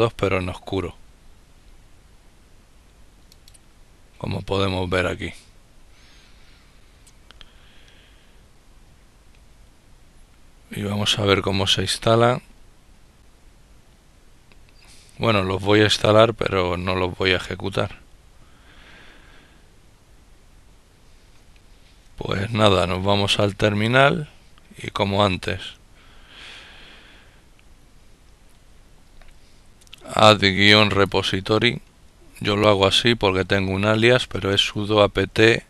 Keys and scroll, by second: 27.9 typing, 31.2-31.9 typing, 35.1-35.6 typing.